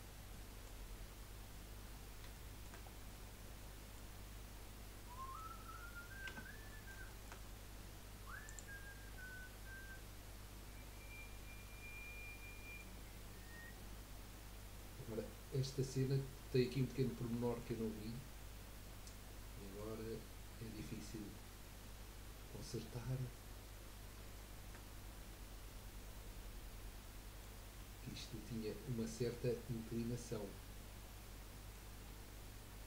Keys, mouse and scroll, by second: 0.0 scroll up 1, 0.1 scroll down 3, 0.3 middle click, 0.9-2.3 scroll up 4, 2.3-2.9 shift+middle drag, 2.9 scroll down 3, 3.1-5.5 middle drag, 5.5-6.2 scroll up 4, 6.2 Tab, 6.7 middle click, 7.5 scroll up 2, 8.4 click, 9.2-12.2 middle drag, 13.5 scroll down 4, 15.3-17.7 middle drag, 17.7-18.1 scroll up 3, 18.1-20.0 middle drag, 20.0-20.6 scroll up 1, 22.8-23.3 scroll down 2, 23.4-25.1 scroll up 1, 25.1 scroll down 1, 25.8-28.6 middle drag, 28.6-29.0 scroll up 1, 29.0-32.0 middle drag, 32.0-32.5 scroll down 2, 32.5-32.8 middle drag.